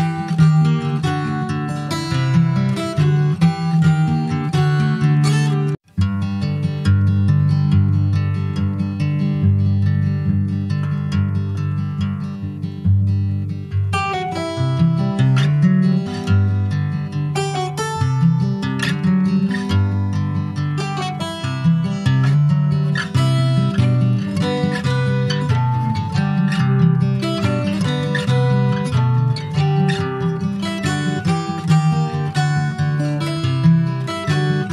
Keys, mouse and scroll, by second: 4.2 s, 6.8 click, 8.6-9.0 scroll down 3, 9.0 middle click, 9.7 ctrl+s, 10.0 middle click, 10.5 Tab, 11.0 click, 11.8 click, 13.0 middle click, 13.5-13.8 scroll up 1, 13.8 click, 14.6-15.6 middle drag, 15.6 click, 16.8 click, 17.2 middle click, 17.8 Tab, 18.0 click, 18.2 scroll down 3, 18.4 middle click, 18.9-19.3 scroll down 1, 19.3 shift+middle click, 19.9 scroll up 1, 20.1 ctrl+s, 20.3 middle click, 21.1 click, 21.4 Tab, 21.8-22.5 scroll up 2, 22.8 shift+d, 24.1 middle click, 24.7 s, 25.9 middle click, 26.2 scroll up 1, 27.0 click, 28.7 middle click, 29.2 s, 32.3 click, 34.5 s.